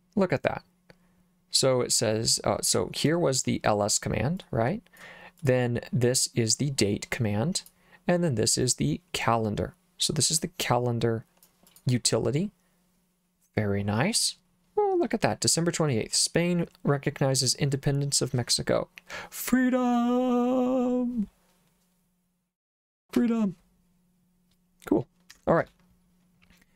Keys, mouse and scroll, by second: 4.4 click, 5.4 click, 6.6-7.7 drag, 8.6-11.5 drag, 11.7 click, 25.3 Escape, 25.6 Return.